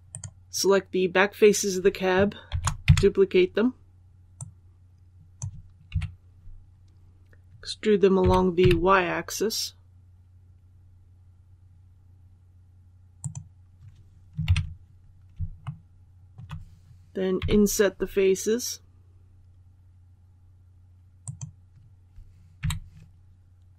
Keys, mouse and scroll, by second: 0.0 right click, 2.4 shift+d, 4.2 click, 8.1-8.5 typing, 13.1 click, 14.3 KP_1, 15.5 shift+middle click, 21.1 click, 22.5 2.